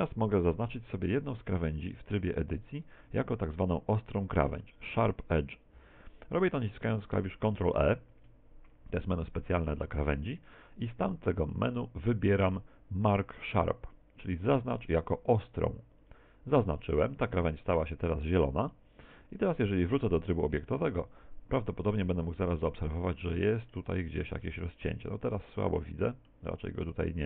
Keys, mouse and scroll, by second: 1.4 Tab, 2.2 right click, 2.8 right click, 3.7 shift+right click, 4.2 shift+middle click, 4.9 middle click, 8.1 ctrl+e, 17.8-18.8 scroll up 2, 18.8 shift+middle click, 18.8 scroll up 1, 19.6 Tab, 20.4 middle click, 22.3-22.8 scroll down 6, 22.8 middle click, 23.7 middle click, 24.5 middle click, 26.5 middle click.